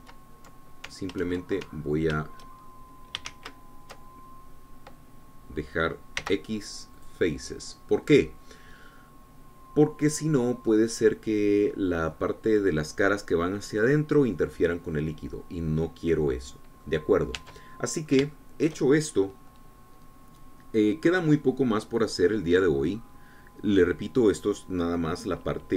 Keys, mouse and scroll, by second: 0.1 ctrl+z, 4.7 ctrl+shift+z, 7.3 x, 8.1 click, 9.2-15.5 drag, 15.5-16.1 scroll down 2, 16.1-20.0 drag, 18.6 Tab.